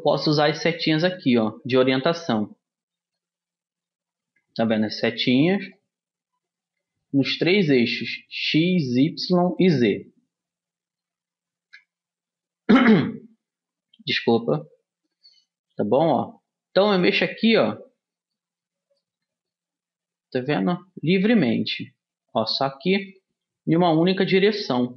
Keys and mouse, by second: 0.4-2.2 drag, 5.0-6.8 drag, 6.8 middle click, 7.2-9.2 drag, 9.2-15.2 middle drag, 11.8 KP_1, 15.5-17.5 drag, 17.6-20.6 middle drag, 20.6-22.5 drag, 22.6-24.3 drag.